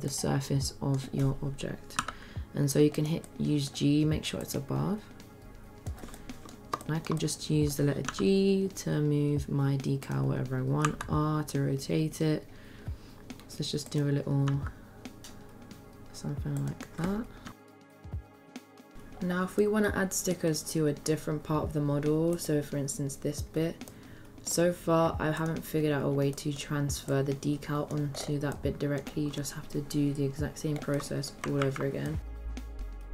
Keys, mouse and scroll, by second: 0.1-1.0 middle drag, 2.0 g, 3.3-3.7 middle drag, 4.4-6.0 drag, 6.2-6.5 middle drag, 6.8 shift+middle drag, 7.2-7.8 middle drag, 8.3 g, 11.0 r, 14.5 g, 17.5 s, 17.6 middle click, 17.7 click, 17.9 g, 17.9 s, 18.1 click, 18.3 middle click, 18.4 click, 18.6 click, 18.9 middle click, 19.6-20.4 middle drag, 23.9-24.5 middle drag, 25.4 click, 26.3 middle drag, 27.1 click, 28.5-29.0 middle drag, 30.9-31.3 middle drag, 31.6 ctrl+z, 31.6 ctrl+a, 32.2 click, 32.3-33.1 typing, 32.4 Tab, 32.8 ctrl+r.